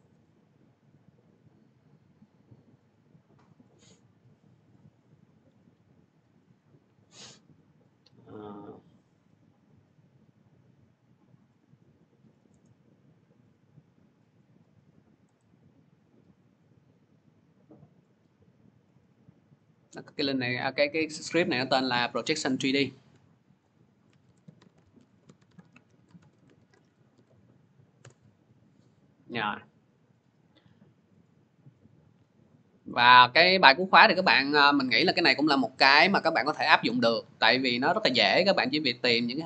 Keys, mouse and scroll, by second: 1.3 click, 1.5 click, 2.4 click, 3.3 click, 3.5 click, 7.2 click, 7.5 click, 9.3-9.9 scroll down 8, 12.2 click, 12.2 scroll, 12.5 right click, 13.3-14.1 click, 15.2 right click, 15.8 click, 15.8 right click, 16.3 click, 19.5 right click, 20.2 click, 22.6 click, 23.4 click, 23.8-26.8 typing, 27.0 ctrl+v, 27.8 Return, 29.1 :, 31.1 click, 32.1 click, 34.1 click.